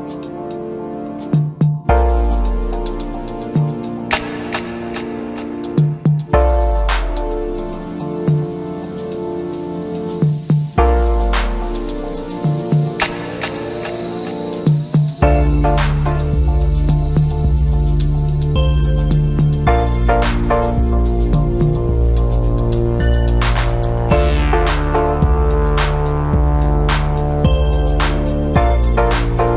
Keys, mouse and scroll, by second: 1.3-4.4 middle drag, 4.6 scroll down 1, 4.6-6.4 scroll up 6, 6.5-7.1 ctrl+KP_8, 7.8-9.2 scroll up 2, 9.2 click, 9.8-11.1 scroll up 2, 11.1-13.6 middle drag, 13.6 click, 14.9 shift+click, 15.7-17.0 scroll down 11, 17.1 KP_1, 18.8 e, 23.0 g, 26.4-27.6 scroll down 3, 27.6-29.5 middle drag.